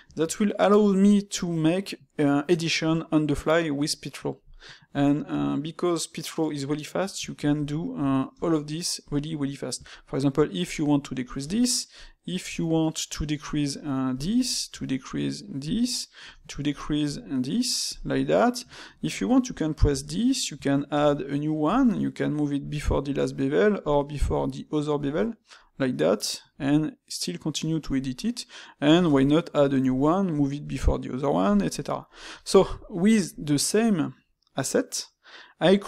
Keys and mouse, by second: 0.0 shift+q, 3.4-8.3 middle drag, 8.3 space, 18.0-21.7 middle drag, 23.3-31.3 middle drag, 31.7-35.8 middle drag.